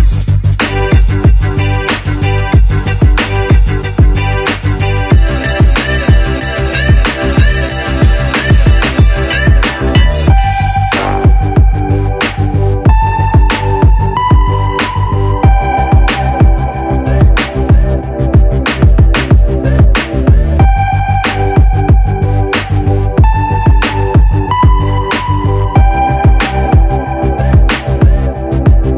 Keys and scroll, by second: 4.6 super+d, 6.7 v.